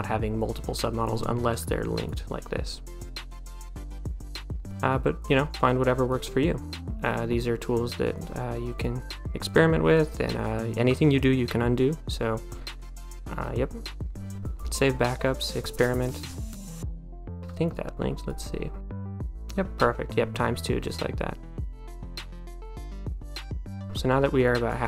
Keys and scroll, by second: 24.5 d.